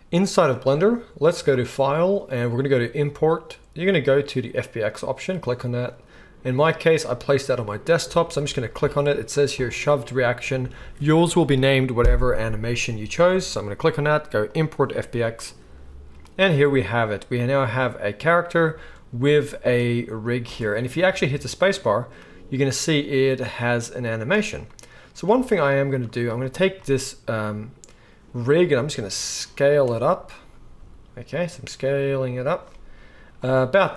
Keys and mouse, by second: 1.6-23.7 drag, 20.4 space, 23.8-26.0 drag, 25.3 space, 26.0-33.4 shift+middle drag, 28.9 s, 30.8 s, 33.4 click.